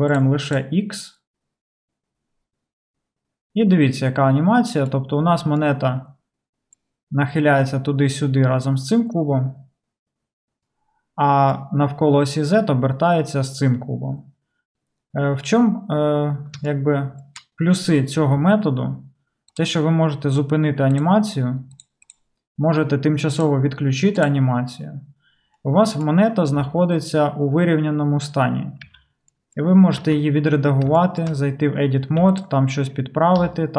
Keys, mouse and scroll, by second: 0.3 middle click, 0.5 drag, 0.6-19.6 middle drag, 19.6-21.9 drag, 21.9 middle drag, 22.1 click, 22.2-23.4 middle drag, 23.4 click, 23.5-24.2 middle drag, 24.2 click, 24.3-33.7 middle drag, 26.7 n, 29.0 n, 30.1 Tab, 32.3 3, 33.5 g.